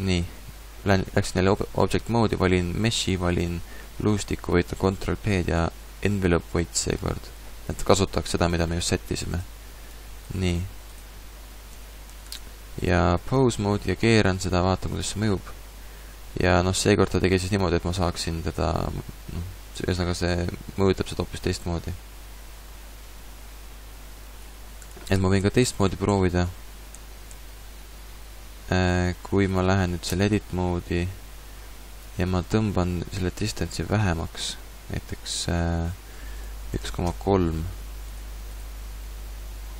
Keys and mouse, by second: 4.7 ctrl+p, 11.8 Tab, 12.1 Tab, 13.6 r, 16.8 click, 18.5 click, 25.0-25.6 ctrl+z, 26.1 ctrl+z, 27.0 ctrl+z, 27.3 ctrl+z, 30.1 Tab, 36.4-38.1 drag, 38.1 middle click, 38.5-39.7 drag.